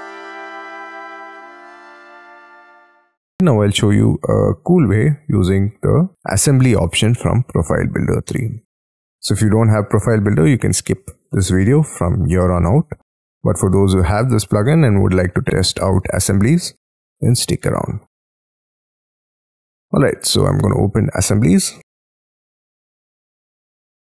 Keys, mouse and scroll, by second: 0.4 middle click, 0.8 middle click, 1.0-2.1 scroll down 35, 1.3 shift+middle click, 1.5 y, 1.7 middle click, 2.1 Escape, 2.2-2.8 scroll up 7, 2.8 middle click, 2.9 middle click, 3.5 middle click, 6.7 middle click, 8.7 middle click, 9.4 shift+scroll down 1, 13.2-17.1 scroll up 12, 17.1-18.4 scroll up 18, 18.4-19.5 scroll down 22, 19.6-20.8 scroll up 14.